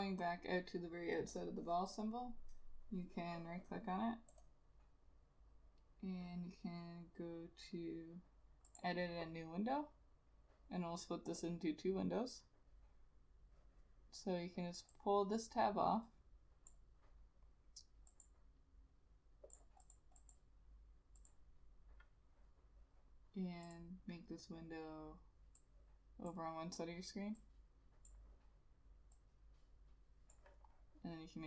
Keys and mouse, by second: 4.4 right click, 20.0 double click.